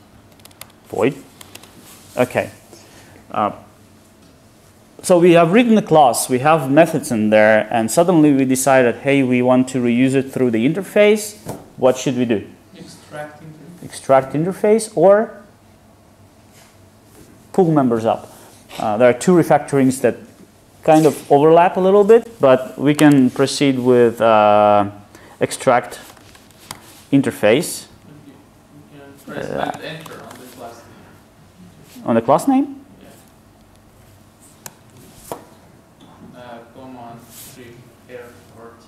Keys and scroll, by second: 34.7 alt+Return.